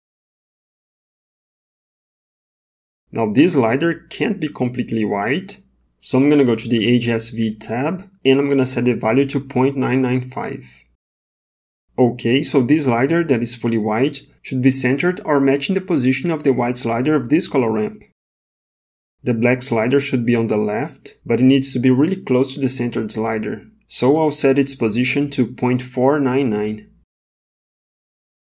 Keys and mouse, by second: 3.6 click, 8.8 KP_9, 13.2 click, 20.0-22.4 drag, 23.1-26.7 drag, 26.2 KP_9.